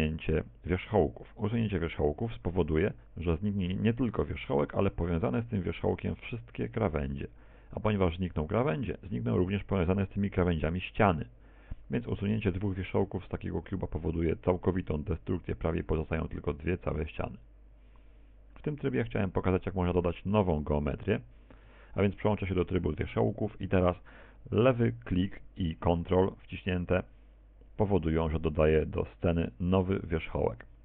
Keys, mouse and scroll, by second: 13.1 x, 20.5 Tab, 21.1 Tab, 27.4 ctrl+click.